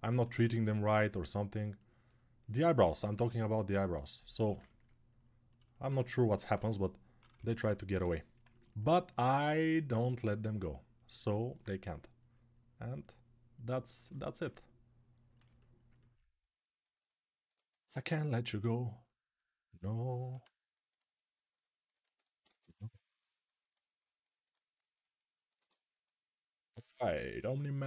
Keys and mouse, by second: 0.1 1, 4.3-5.8 ctrl+alt+drag, 5.8-10.7 ctrl+alt+right drag, 6.3-7.7 typing, 16.8-21.7 ctrl+alt+drag, 22.2 2, 25.3 right click, 25.6 ctrl+alt+right click.